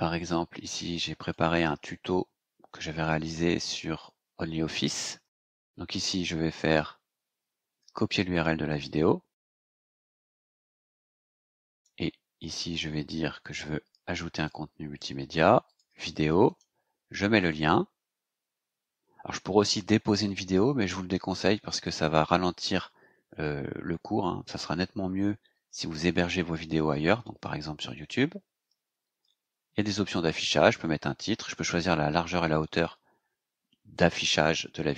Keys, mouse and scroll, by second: 1.2 click, 2.1-2.5 scroll down 2, 2.6 scroll down 2, 3.3 scroll up 2, 4.1 scroll down 2, 5.2-5.5 scroll down 2, 6.6 right click, 8.3 click, 9.9 click, 11.7 click, 14.3 click, 15.6 click, 16.4 right click, 17.3 click, 29.7 click.